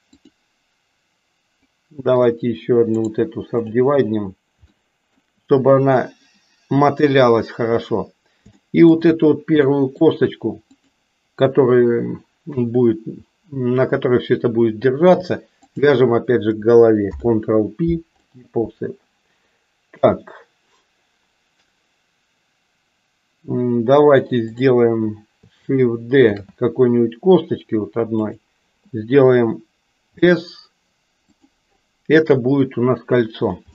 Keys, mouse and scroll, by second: 2.1 click, 2.9 right click, 4.9 shift+middle click, 8.5 shift+middle click, 9.6 shift+middle click, 10.6 click, 17.1 ctrl+p, 24.5 click, 26.3 shift+d, 30.1 s.